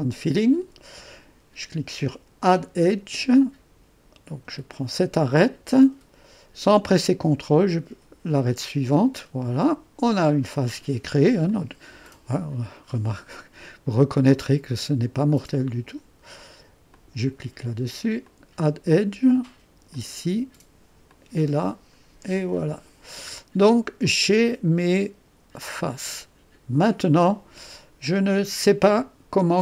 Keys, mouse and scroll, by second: 0.0 click, 2.5 click, 4.7 click, 7.5 click, 8.6-10.1 drag, 10.8 click, 11.6-12.8 drag, 14.4-15.9 drag, 17.0 click, 18.3 click, 20.0 click, 21.2-29.6 drag.